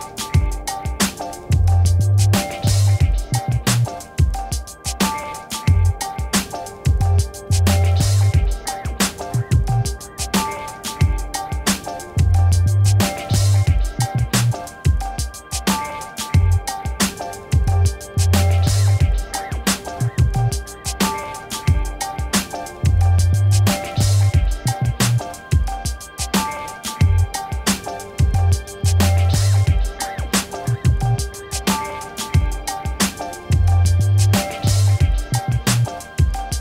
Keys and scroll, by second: 21.7 ctrl+t.